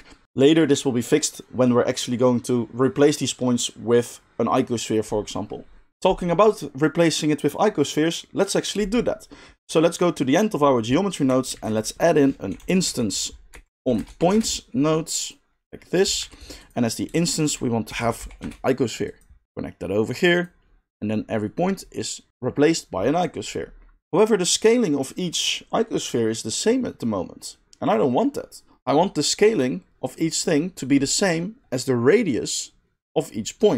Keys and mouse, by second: 5.9-15.8 middle drag, 11.5 shift+a, 15.8 click, 16.1 g, 16.5 middle click, 16.5-19.2 drag, 17.1 shift+a, 19.2 middle click, 19.4-33.7 drag.